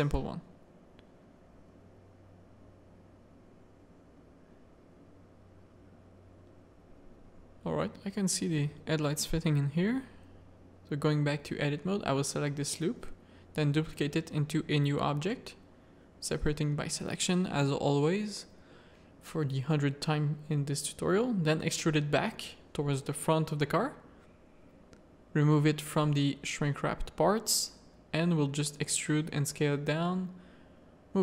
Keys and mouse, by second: 0.7 middle click, 1.3 middle click, 3.2 middle click, 4.5-6.1 middle drag, 8.0 z, 8.6 shift+middle click, 9.4 Tab, 9.8 1, 11.4 z, 12.3 z, 13.0 shift+d, 14.4 middle click, 15.6 Tab, 17.8 a, 18.2 z, 18.5 click, 18.9 shift+click, 19.5 middle click, 20.2 e, 24.0 click, 24.8 click, 25.4 z, 27.4 e, 27.8 s, 29.6 click, 30.3 z.